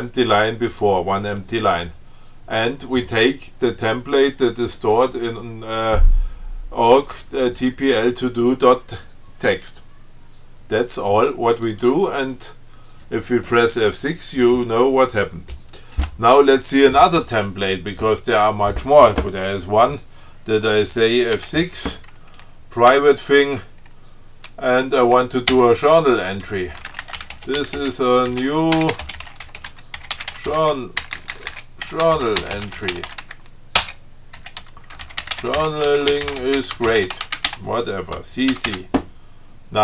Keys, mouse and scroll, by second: 11.9 click, 21.6 F6, 23.2 p, 25.7 j, 26.9-33.9 typing, 34.1 Return, 34.6 Down, 34.8 Tab, 35.0-38.2 typing, 38.8 ctrl+c.